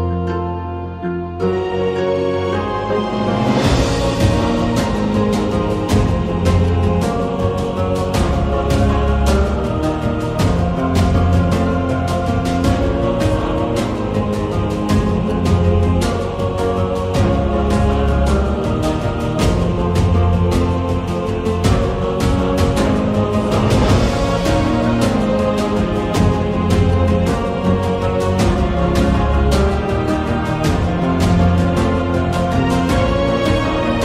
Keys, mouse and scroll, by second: 0.1 s, 1.9 r, 4.1 s, 5.7 middle click, 8.9 r, 10.2 r, 12.1 shift+middle click, 12.6 Tab, 13.1 ctrl+z, 14.8 Tab, 15.6 2, 16.3 Tab, 18.4 g, 18.6 middle click, 19.0 Tab, 21.0 click, 22.1 shift+middle click, 22.4 s, 22.8-24.0 drag, 24.3-25.6 drag, 25.8 middle click, 26.2 ctrl+a, 27.1 shift+middle click, 28.2-29.7 drag, 30.3 r, 32.0 r, 33.7 middle click.